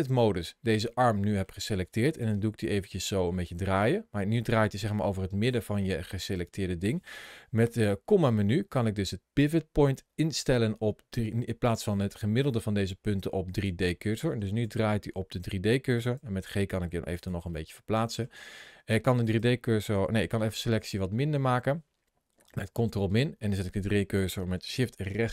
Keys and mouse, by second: 2.0 r, 14.4 r, 15.8 click, 16.0 g, 17.0 click, 17.5 middle click, 20.3 ctrl+KP_Subtract.